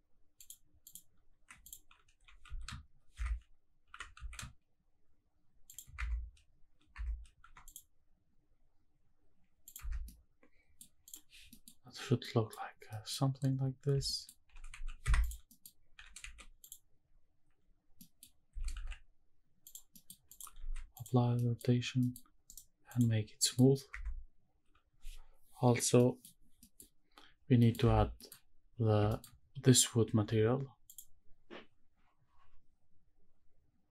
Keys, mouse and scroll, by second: 0.4 click, 0.8 click, 1.6 alt+click, 2.1 g, 2.4 z, 3.1 Escape, 4.0 e, 4.1 z, 5.7 shift+click, 6.0 Tab, 6.9 Tab, 7.4 ctrl+r, 9.6 click, 9.9 Tab, 10.0-10.7 middle drag, 10.0 scroll down 1, 11.1 click, 11.4 scroll down 1, 11.5 middle drag, 11.8 scroll up 1, 12.0 scroll down 2, 12.2 middle drag, 12.7 scroll down 1, 12.9 middle drag, 13.1-14.0 scroll up 3, 14.0 middle drag, 14.4 g, 14.9 shift+z, 15.0 Escape, 15.2 click, 15.5 middle click, 15.9 g, 16.4 shift+z, 16.6 click, 17.6 scroll up 1, 17.8 scroll down 1, 17.9 middle click, 18.5 s, 18.9 shift+z, 19.6 drag, 19.9 middle click, 20.3 click, 20.6 ctrl+a, 21.4 middle click, 21.8 scroll up 1, 22.0 middle drag, 22.5 right click, 23.4 middle click, 23.9 Tab, 24.2-25.5 scroll up 1, 25.5-26.0 scroll down 2, 26.0 middle click, 26.6 middle click, 27.1 scroll up 2, 27.4 scroll down 2, 27.6 middle click, 27.8 Tab, 28.1 middle click, 28.7 scroll down 1, 29.1 shift+middle drag, 31.3 click.